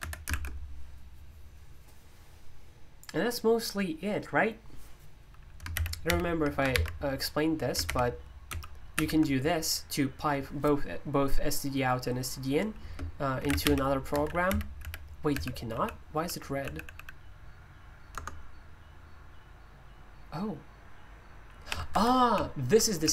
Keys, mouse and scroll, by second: 0.0 Escape, 0.3 shift+k, 7.9-9.0 typing, 12.8-17.3 typing, 18.1 Return, 21.7-23.1 typing, 21.9 Escape.